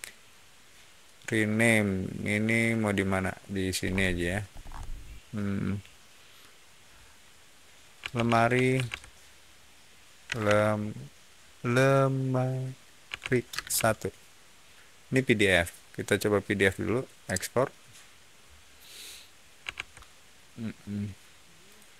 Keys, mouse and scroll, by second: 3.7 scroll down 1, 4.4 middle click, 7.7-10.4 typing, 12.7-13.7 typing, 17.2 click, 19.7 alt+Tab, 21.5 click.